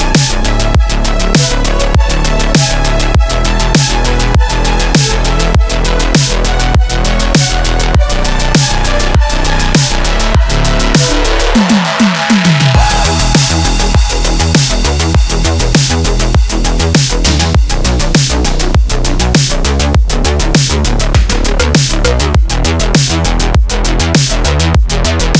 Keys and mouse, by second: 0.2 shift+middle click, 0.9 Tab, 1.2 click, 1.6-4.2 middle drag, 4.8 click, 5.1-5.5 middle drag, 5.7 Tab, 6.3 3, 6.5 click, 8.2 x, 9.1-16.4 middle drag, 18.0 middle click, 18.3 Tab, 19.7 a, 20.9 h, 21.9-22.3 shift+drag, 22.4 drag, 24.0-24.4 drag, 24.6 shift+click.